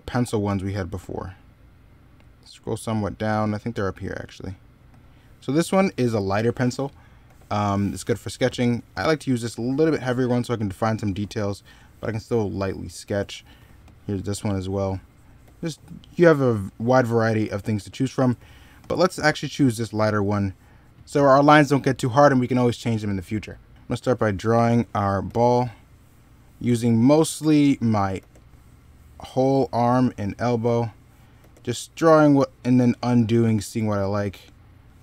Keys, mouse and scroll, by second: 7.1 ctrl+z, 10.7 ctrl+z, 12.9 ctrl+z, 15.2 ctrl+z, 17.2 ctrl+z, 20.7 middle click, 25.1 ctrl+z, 29.7 ctrl+z.